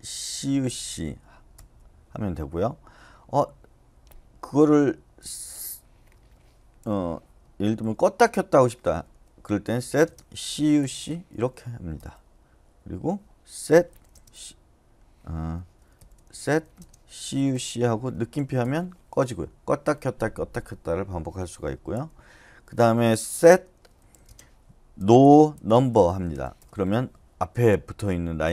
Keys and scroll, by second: 0.1-0.9 typing, 1.5 Return, 4.9-11.3 typing, 6.1 Escape, 11.9 Return, 13.4-14.1 typing, 15.4 Escape, 15.9-17.1 typing, 18.6 Return, 21.9 u, 23.4-25.9 typing, 26.6 Return.